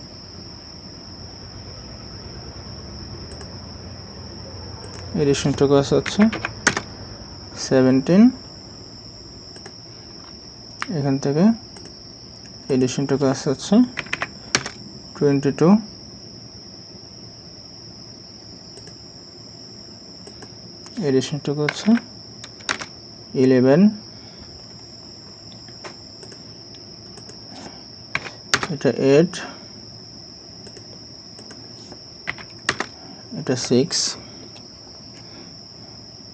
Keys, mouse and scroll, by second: 6.1 typing, 6.7 Return, 14.0 typing, 14.6 Return, 21.7 typing, 22.7 Return, 24.6 scroll down 1, 28.1 8, 28.5 Return, 32.3 6, 32.7 Return.